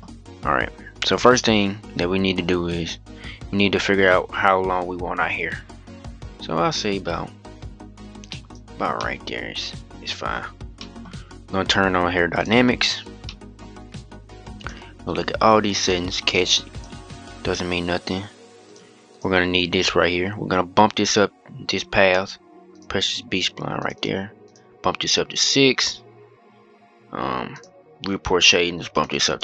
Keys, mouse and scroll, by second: 1.6-2.9 scroll down 1, 3.8-6.8 drag, 8.7-10.2 middle drag, 10.2-10.5 scroll up 2, 10.5-11.2 middle drag, 11.2-12.2 scroll down 1, 12.2-12.5 drag, 13.0-14.3 middle drag, 14.3 click, 14.8-15.6 scroll down 1, 15.6-19.4 drag, 19.4-22.5 scroll down 4, 22.5-22.9 drag, 23.5-27.7 drag, 27.7-28.2 scroll down 2, 28.2-28.7 scroll down 1, 28.7-29.4 drag.